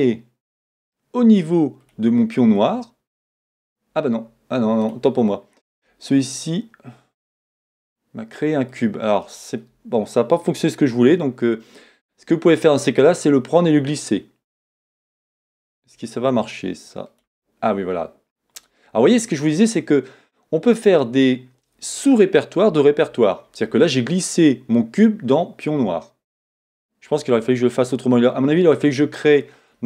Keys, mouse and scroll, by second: 14.6 click.